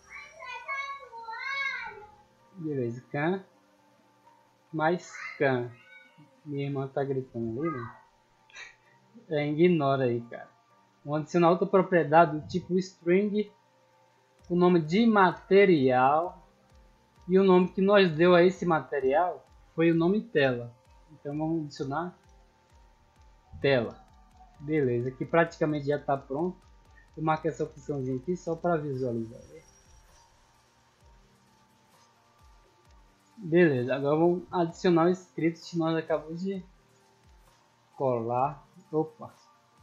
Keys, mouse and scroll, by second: 0.6 click, 1.2-2.5 typing, 1.2 click, 3.0 click, 3.7 click, 4.1 c, 4.5 m, 5.5 click, 6.6 click, 8.8 scroll up 2, 9.2-9.7 middle drag, 10.7 click, 11.9 click, 12.9 click, 13.5 click, 14.8-16.7 typing, 17.8 click, 18.7 click, 21.3 click, 21.7-22.7 typing, 23.3 click, 26.6 click, 28.2 click, 31.3 right click, 31.8 click, 32.2 click, 33.2-33.6 middle drag, 34.5 click, 37.5 click, 39.2 click.